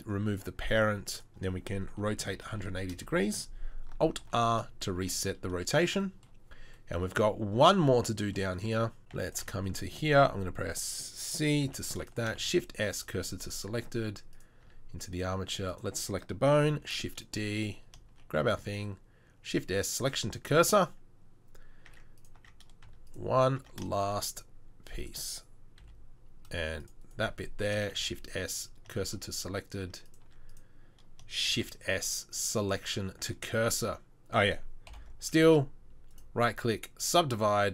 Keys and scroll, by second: 1.9 r, 4.2 alt+r, 9.0 Tab, 9.2 Tab, 9.5 Tab, 11.7 c, 12.4 shift+s, 13.9 Tab, 14.7 Tab, 16.8 shift+d, 18.4 shift+s, 21.9 Tab, 22.4 Tab, 22.9 Tab, 23.7 Tab, 25.8 c, 27.9 shift+s, 29.9 shift+s, 29.9 Tab, 30.3 Tab, 31.5 shift+s, 34.9 ctrl+l, 35.5 w.